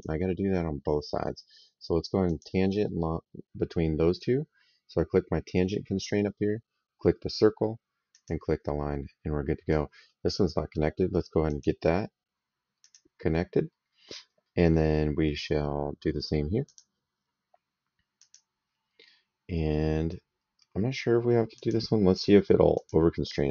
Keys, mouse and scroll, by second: 2.1 click, 7.9 click, 11.3 click, 12.6 click, 14.5 middle click, 16.5 click, 18.0 click, 21.4 click, 22.6 click.